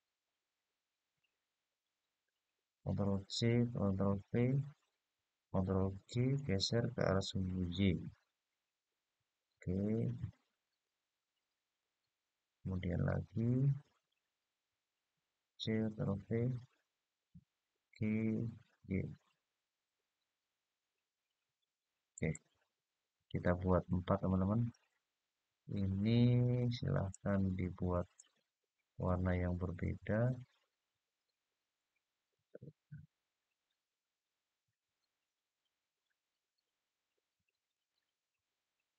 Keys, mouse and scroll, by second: 3.0 ctrl+c, 3.8 ctrl+v, 5.5-7.7 g, 7.7-9.8 y, 10.4 click, 11.5 click, 12.8 click, 15.3 ctrl+c, 15.8 ctrl+v, 17.0-18.9 g, 19.0-21.4 y, 21.9 click, 22.8 click, 24.4 click, 26.9 click, 27.9 click, 35.2 click, 37.4 click.